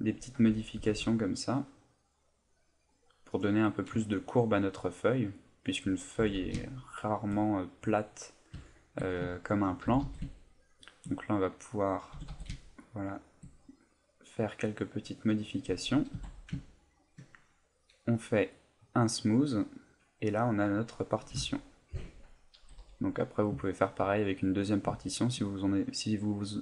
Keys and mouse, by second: 0.4 g, 3.4 click, 4.6 middle click, 6.2 g, 7.1 shift+click, 7.5 right click, 8.0 middle click, 8.7 shift+middle click, 9.3 ctrl+middle click, 9.8 g, 10.9 shift+click, 11.5 right click, 12.1 g, 13.2 shift+click, 14.2 right click, 14.9 middle click, 16.1 Tab, 16.6 ctrl+middle click, 16.9 ctrl+middle click, 17.3 middle click, 18.8 click, 19.5 middle click, 22.5 click, 22.7 a, 23.2 middle click, 23.6 ctrl+middle click, 24.1 middle click, 25.0 shift+middle click, 25.6 middle click.